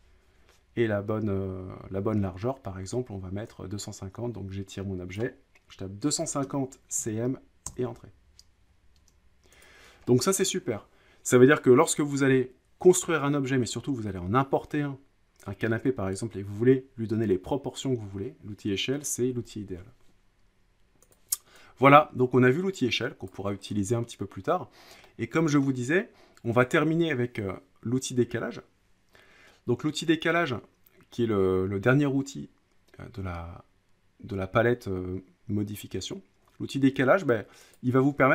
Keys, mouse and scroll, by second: 5.1 click, 5.8-7.6 typing, 7.7 Return, 8.8-9.7 typing, 9.6 click, 10.3 middle click, 21.1 click, 23.3 click, 23.6-24.3 scroll, 25.4 scroll, 25.6 scroll down 2, 25.8-26.2 scroll up 5, 26.2 scroll down 3, 37.8 click.